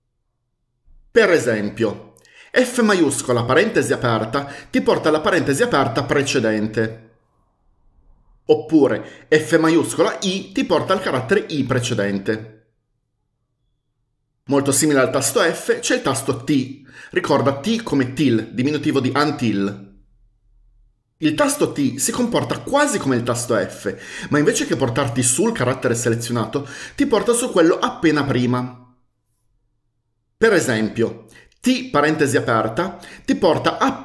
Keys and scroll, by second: 3.1-3.7 typing, 9.8-10.2 typing, 31.9-32.2 typing.